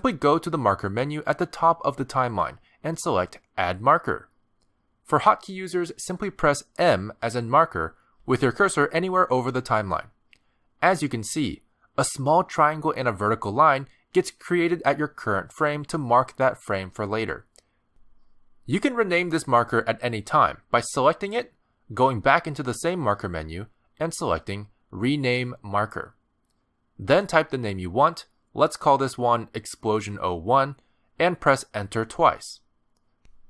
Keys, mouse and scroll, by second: 2.6 click, 6.1 click, 13.3 click, 22.3 click, 23.6 click, 26.5 click, 31.1 BackSpace, 32.9 Return, 32.9 BackSpace.